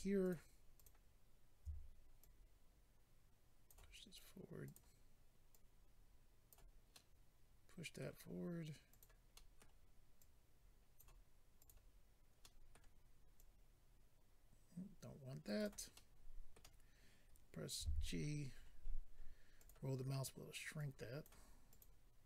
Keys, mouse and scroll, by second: 0.3 shift+click, 0.8 shift+click, 0.8 shift+click, 2.2 click, 4.6 click, 4.7 click, 5.5 click, 6.9 middle click, 8.9 click, 9.0 click, 9.4 middle click, 10.2 click, 11.6 click, 11.6 click, 12.7 middle click, 13.3 click, 15.4 right click, 15.6 right click, 15.9 middle click, 17.8 g, 18.1-18.8 scroll up 7, 19.6 click, 19.7 click, 20.7 click, 21.7 click, 21.8 click.